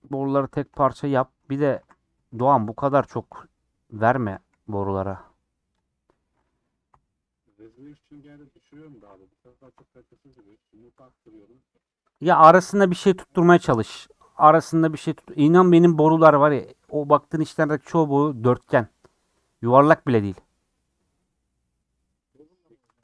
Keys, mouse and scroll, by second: 0.1 Tab, 0.3-0.9 scroll up 5, 0.5 shift+middle click, 1.1 scroll down 3, 1.5 ctrl+z, 1.7 ctrl+z, 2.2 Tab, 2.4 click, 2.8 Tab, 3.3 g, 4.2 shift+Tab, 4.5 g, 5.7 click, 6.2 scroll down 1, 6.9 /, 7.3 scroll down 1, 7.5 middle click, 7.9-8.5 scroll up 10, 8.8 shift+middle click, 9.6 KP_Decimal, 10.0 scroll up 3, 10.5 Tab, 10.9 middle click, 11.2 scroll down 5, 11.8 middle click, 12.3 scroll down 1, 13.7 scroll up 1, 14.7 scroll up 1, 15.4 scroll up 2, 19.0 scroll down 1, 20.1 scroll down 3, 22.4 scroll up 3.